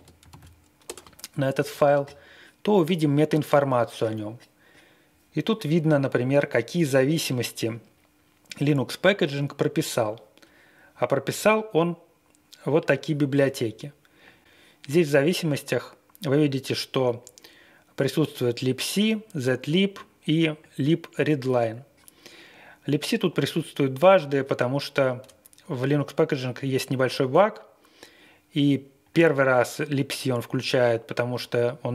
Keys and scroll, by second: 0.0-0.2 typing, 0.3 super+v, 0.8 Return.